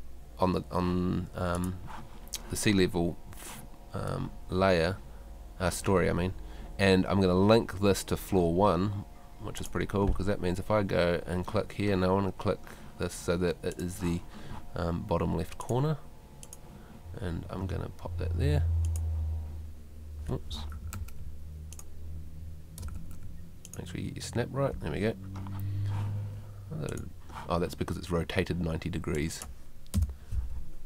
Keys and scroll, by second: 23.0 super+z, 29.9 0.